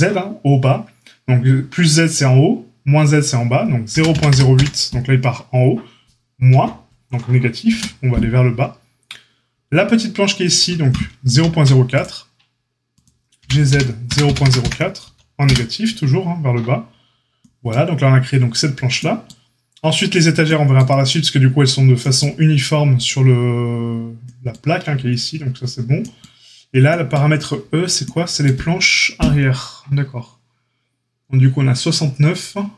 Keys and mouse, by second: 11.2 ctrl+r, 13.3 g.